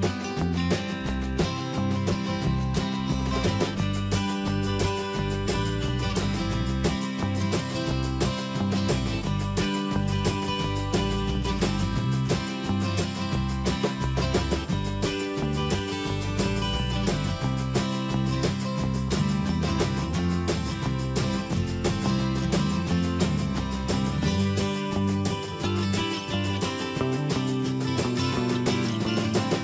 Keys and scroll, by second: 0.2 Return, 1.2 ctrl+d, 6.9 ctrl+t, 8.3 Return, 13.9 Return, 15.7 ctrl+t, 17.3 Left, 29.0 ctrl+z.